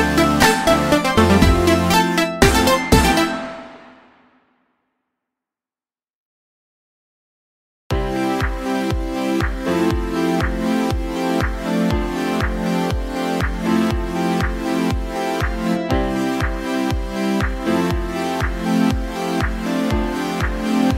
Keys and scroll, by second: 3.6 ctrl+d, 4.7 ctrl+v, 7.5 ctrl+v.